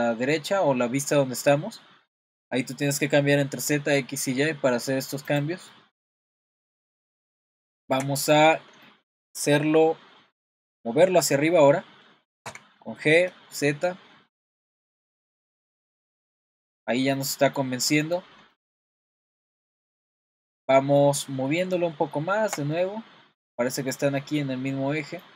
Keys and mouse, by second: 5.8-6.2 middle drag, 6.8 middle click, 7.7 shift+middle click, 8.9-9.2 shift+middle drag, 12.4 g, 15.5-16.5 middle drag, 17.2-17.6 middle drag, 17.8 middle drag, 18.5-18.9 middle drag, 20.3-21.0 middle drag, 21.2 middle click, 22.1-22.5 shift+middle drag, 22.8-25.3 middle drag.